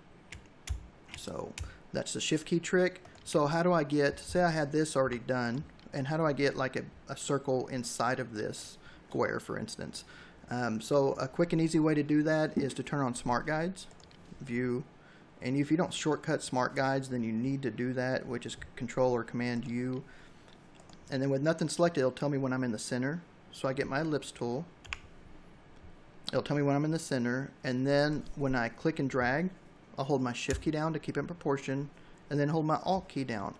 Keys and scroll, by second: 4.9 v, 24.6 l.